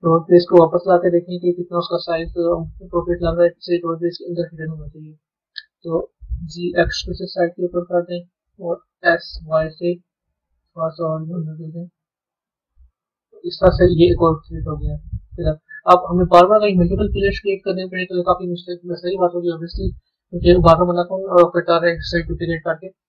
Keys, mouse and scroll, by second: 1.2 click, 2.0-3.9 middle drag, 3.9-4.6 scroll down 2, 4.6-6.4 middle drag, 13.0 Tab, 13.8 z, 15.2-16.1 middle drag, 16.1-16.5 scroll down 2, 16.5-19.7 middle drag, 21.8 click, 22.5-23.0 scroll down 1.